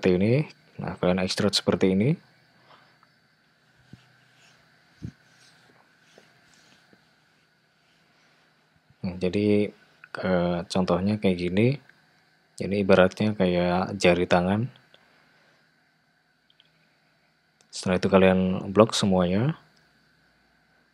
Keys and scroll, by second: 2.0 e, 5.1 e, 8.4 e, 13.7 g.